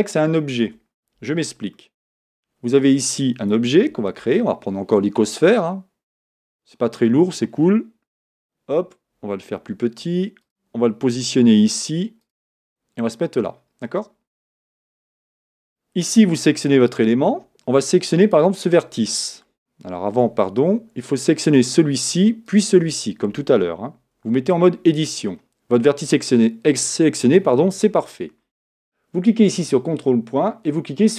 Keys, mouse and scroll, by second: 0.6 Tab, 1.8-3.6 shift+middle drag, 3.6 Tab, 4.2 shift+a, 8.2 KP_1, 9.6 s, 11.2 g, 12.7 middle click, 13.3-15.3 middle drag, 15.3 Tab, 15.6 Tab, 15.6 click, 17.0 Tab, 18.3 click, 20.1 Tab, 21.5 click, 22.5 shift+click, 24.4 Tab.